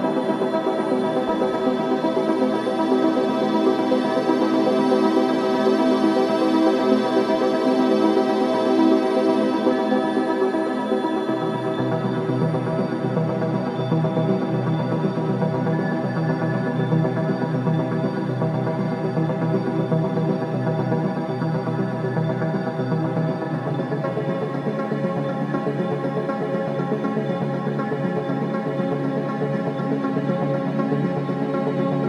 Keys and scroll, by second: 0.6 ctrl+space, 2.3 ctrl+KP_2, 7.5 alt+shift+v, 8.5 ctrl+space, 13.8 shift+a, 14.9 BackSpace, 16.3 p, 19.7 shift+a, 27.7 v, 30.1 ctrl+space, 30.3 v.